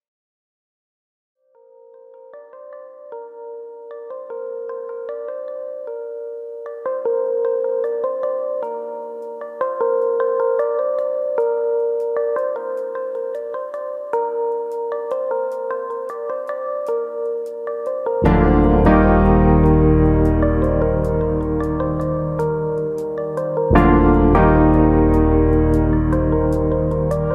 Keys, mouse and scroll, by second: 0.1 shift+middle click, 0.7 click, 1.2 click, 2.3 click, 2.7 click, 3.3 click, 4.5 click, 4.5 middle click, 4.8 shift+middle click, 5.1 middle click, 5.9 click, 6.1 middle click, 6.8 shift+click, 7.0 middle click, 7.5 click, 8.4 middle click, 11.8-12.5 scroll down 2, 12.1 middle click, 12.5 Tab, 12.7-13.5 scroll down 5, 13.2 middle click, 14.0-15.4 scroll up 4, 14.4 Tab, 15.6 click, 16.2 ctrl+click, 17.2 g, 19.4 click, 19.9 click, 20.1 g, 21.0 click, 21.3 click, 21.5 g, 22.2 click, 23.3 click, 23.8 ctrl+click, 24.0 ctrl+click, 24.5 g, 25.5 click, 25.7 middle click, 26.1 Tab, 26.2 scroll down 2, 26.4 middle click, 26.8-27.3 scroll down 2, 27.1 middle click.